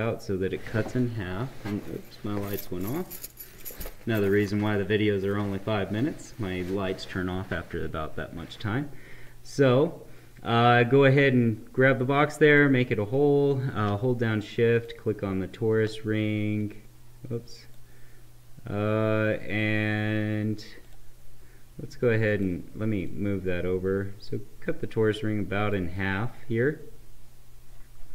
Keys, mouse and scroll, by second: 9.3-12.4 drag, 14.6 shift+click, 16.6-20.2 drag, 20.8-28.1 drag.